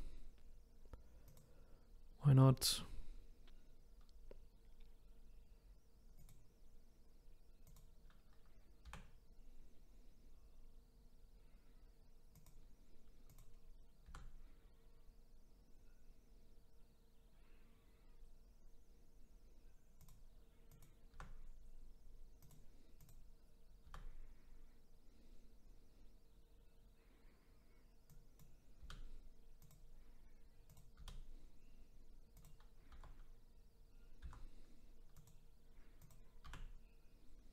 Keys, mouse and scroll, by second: 1.3 click, 6.2 click, 7.7 click, 8.9 g, 13.3 click, 14.1 g, 20.7 click, 21.1 g, 23.0 click, 23.9 g, 28.8 g, 30.7 click, 31.0 g, 32.9 t, 34.2 f, 35.2 click, 36.0 click, 36.5 r.